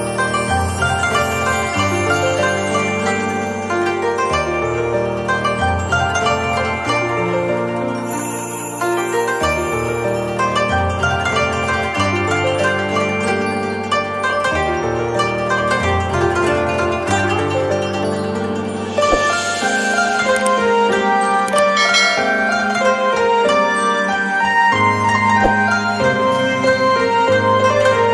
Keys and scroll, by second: 0.5 shift+Up, 13.5 z.